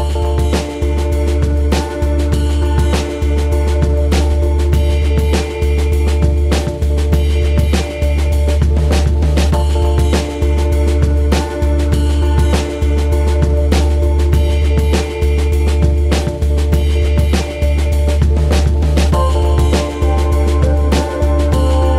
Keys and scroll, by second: 0.6 ctrl+Tab, 10.7 KP_3, 17.3 KP_0.